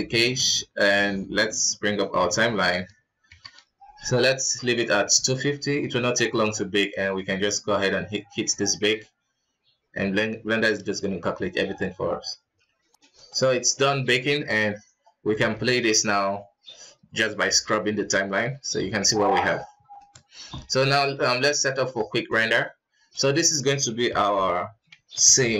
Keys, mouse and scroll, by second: 0.6 ctrl+s, 2.1-3.5 drag, 3.5 shift+F12, 5.3 ctrl+s, 7.0-13.2 drag, 13.8 middle click, 14.2 shift+space, 14.8-15.2 scroll down 2, 15.4 shift+space, 15.7-18.9 drag, 19.4 middle click, 19.6 scroll up 3, 19.9 shift+middle click, 20.5-20.9 middle drag, 20.9-21.6 scroll down 9, 22.2 click, 23.1 click, 23.3-25.5 drag.